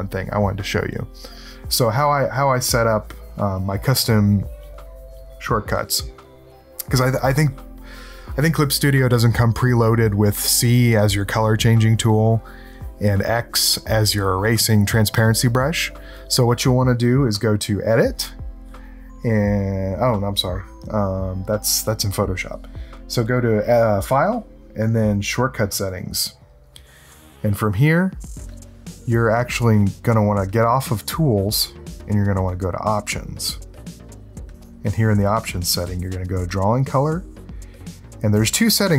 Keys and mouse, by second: 3.2 click, 8.4 click, 17.7 click, 25.8 click, 27.6 click, 28.9 click, 32.3 click, 34.5 click, 36.2 click, 36.8 middle click, 37.5 middle click.